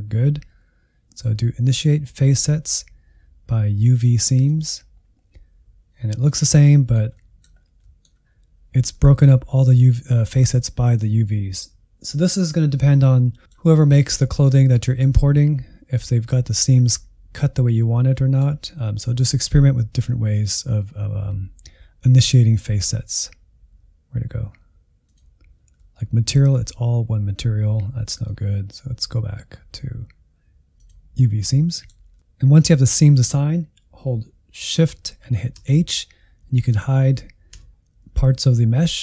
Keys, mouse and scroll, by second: 5.3-7.6 middle drag, 7.6 scroll up 1, 7.8 middle click, 8.2-8.9 scroll down 1, 8.9-13.7 middle drag, 13.7 scroll up 1, 14.1-20.3 middle drag, 20.3-25.7 drag, 25.7-28.1 middle drag, 28.1-31.1 drag, 31.4-35.5 middle drag, 35.5 shift+h, 36.7 shift+h, 37.5 shift+h.